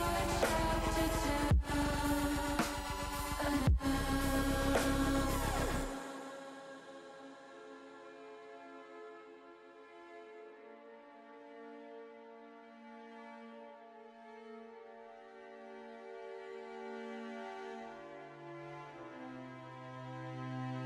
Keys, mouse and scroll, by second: 0.4 ctrl+z, 4.4-5.8 drag, 8.0 s, 8.9 click, 10.4 e, 10.5 s, 11.2 click, 13.0 ctrl+z, 16.4 click, 18.2 e, 18.7 s, 19.6 click, 19.9 ctrl+z.